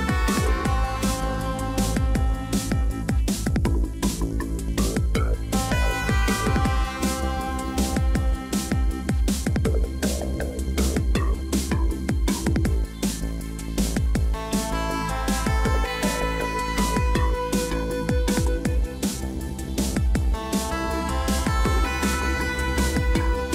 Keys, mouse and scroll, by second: 12.6 5, 13.0 0.